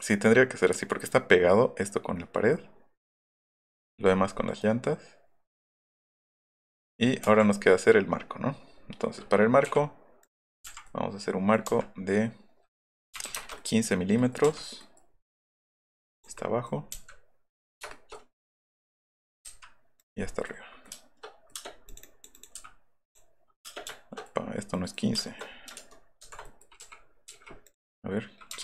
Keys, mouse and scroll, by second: 2.6-3.7 middle drag, 4.1 middle click, 6.2 middle click, 7.2 middle click, 10.2 click, 10.9 middle click, 11.7 Left, 13.1 KP_1, 13.4 Return, 13.4 KP_5, 13.6 click, 14.2 click, 14.8 click, 16.2 click, 16.4 middle click, 17.0 Left, 17.6 click, 19.4 Up, 20.0 click, 20.3 middle click, 20.9 shift+middle click, 21.5 space, 22.5 m, 23.7 space, 23.9 shift+middle click, 24.8 middle click, 25.8 ctrl+z, 26.9 l, 27.4 l, 27.7 click.